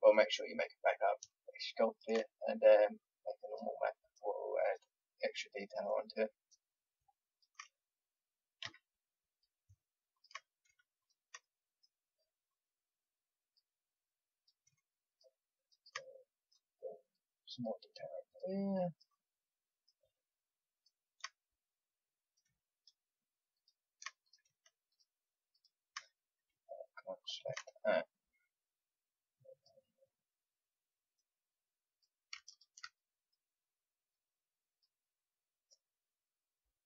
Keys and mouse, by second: 1.9-3.9 drag, 8.6 a, 22.2-27.2 drag, 30.0 click, 30.2 click, 30.4-31.8 middle drag, 31.8-33.2 drag, 33.2 middle click, 34.7-36.8 drag.